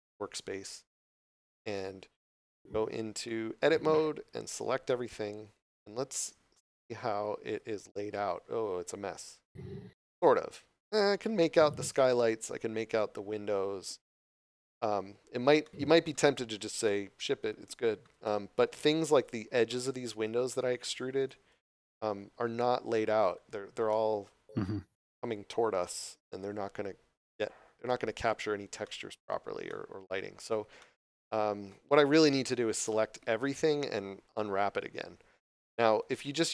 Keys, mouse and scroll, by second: 1.6 Tab, 3.2 middle click, 3.6 scroll down 1, 4.8 3, 6.1 middle click, 6.9 3, 8.4 scroll up 1, 14.8 scroll up 1, 16.5 scroll up 1, 16.8 middle click, 18.2 shift+middle click, 19.6 middle click, 21.1 shift+right click, 22.5 shift+middle click, 23.9 shift+middle click, 24.6 scroll up 1, 27.2 scroll down 1, 27.8 shift+middle click, 28.7 scroll down 1, 28.8 shift+middle click, 30.2 scroll down 1, 30.7 middle click, 32.8 a.